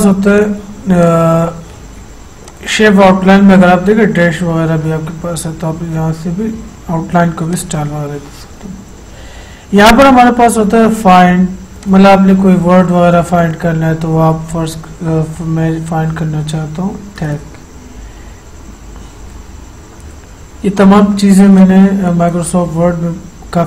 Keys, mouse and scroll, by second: 7.6 click, 12.0 click, 15.2-15.6 typing, 19.3 typing, 21.7-23.6 drag.